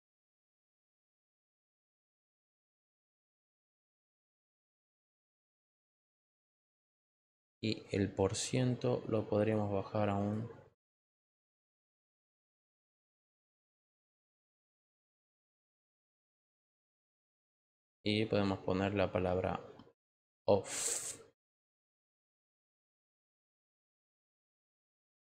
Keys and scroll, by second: 21.7 f.